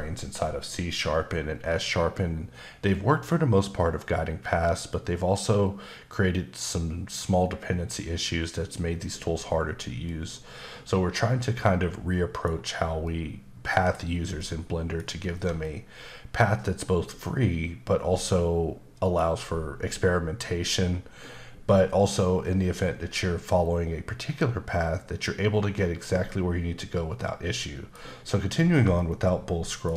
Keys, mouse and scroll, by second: 10.1 middle click, 13.0 middle click, 14.4 middle click, 15.6 middle click, 21.6 middle click, 27.5 middle click, 29.0 shift+middle click.